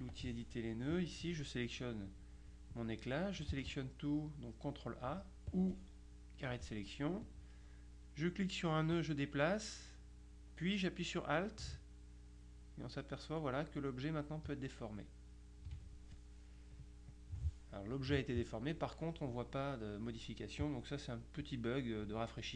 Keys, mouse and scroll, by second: 0.2 click, 1.0 click, 3.6 ctrl+a, 5.6-7.1 drag, 9.0-16.2 drag, 17.2 click, 21.3-22.4 drag.